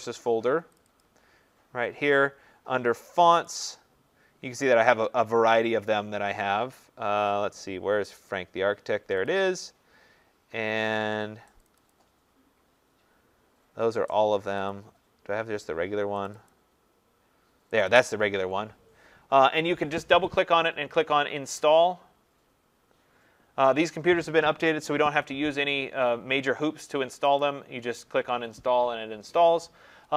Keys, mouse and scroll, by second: 0.8 click, 1.0 click, 3.5 click, 3.7 click, 5.9-6.9 scroll, 7.8-8.4 scroll, 9.2 click, 9.4 click, 11.7 click, 11.9 click, 14.7 click, 16.3 click, 16.5 click, 17.8 click, 18.0 click, 20.4 click, 27.4 click.